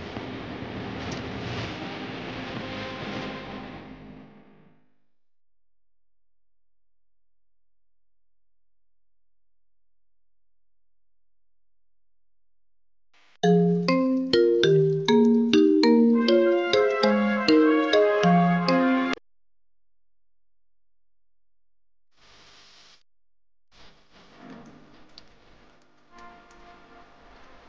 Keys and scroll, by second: 15.0 shift+F2, 15.6 Escape, 23.0 w, 25.4 d.